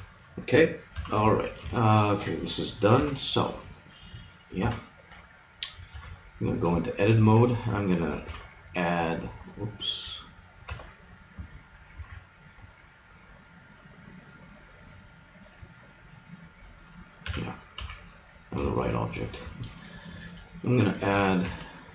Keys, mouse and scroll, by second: 1.0 z, 1.3-3.6 middle drag, 3.0 KP_1, 4.6 KP_3, 5.9 Tab, 8.2 ctrl+r, 10.6 Escape, 12.0 ctrl+Tab, 15.1-16.8 middle drag, 17.2 a, 17.8 KP_3, 21.4 ctrl+r.